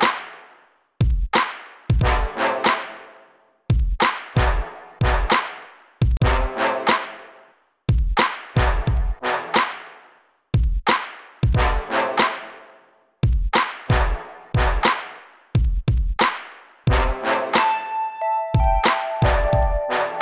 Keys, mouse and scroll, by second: 3.8 click, 3.9 click, 5.0 click, 5.1 click, 5.6 click, 5.8 click, 6.0 click, 6.1 double click, 6.8 double click, 8.4 click, 10.5 middle click, 11.5 scroll down 1, 13.7 right click, 13.9 right click, 14.5 click, 14.7 click, 14.8 click, 16.0 scroll up 2, 18.4 click, 19.6 click, 19.7 click.